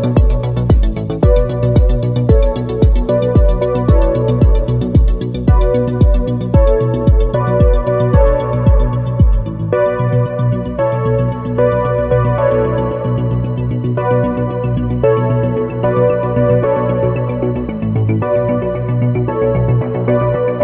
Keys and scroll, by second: 2.7 space, 9.0 ctrl+z, 13.2 space, 14.2 ctrl+z, 14.9 space, 19.0 space.